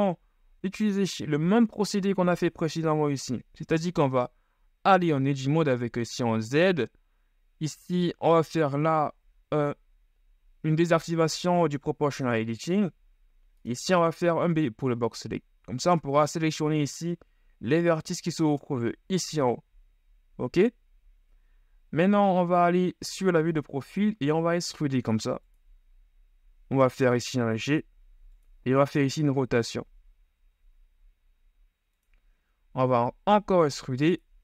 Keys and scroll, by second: 5.3 z, 13.9 b, 22.2 KP_3, 24.3 e, 27.4 g, 33.1 ctrl+e.